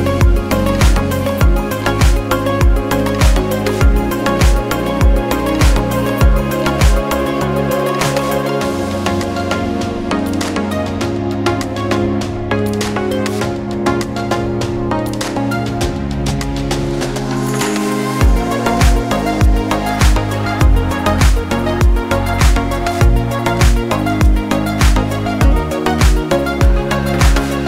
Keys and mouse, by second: 1.3 g, 3.0-3.7 drag, 3.8 shift+drag, 5.8 s, 8.2-9.9 drag, 10.4-10.7 drag, 10.9 s, 13.3-14.6 drag, 14.8-15.5 shift+drag, 15.7-16.6 drag, 17.0 drag, 17.8 s, 19.1-20.0 drag, 20.2 s, 21.1 g, 22.4-23.2 drag, 23.7 drag, 24.0-25.0 shift+drag, 25.2 drag, 25.4-27.1 drag, 27.5 ctrl+a.